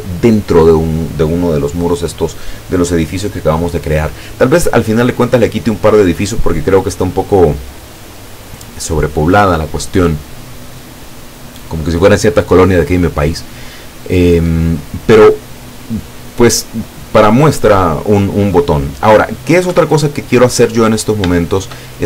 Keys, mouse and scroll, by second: 19.7 Escape, 20.3-20.9 drag, 21.4-22.0 shift+drag.